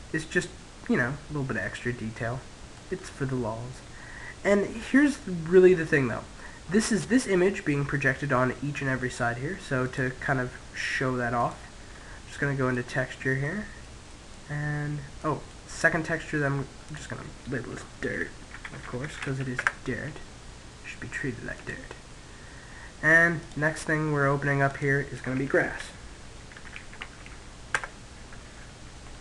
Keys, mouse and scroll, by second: 1.2-7.0 middle drag, 7.5-9.2 middle drag, 9.4 click, 11.0 click, 11.4-16.5 middle drag, 16.5 click, 21.2 click, 23.0-25.8 drag, 29.0 click.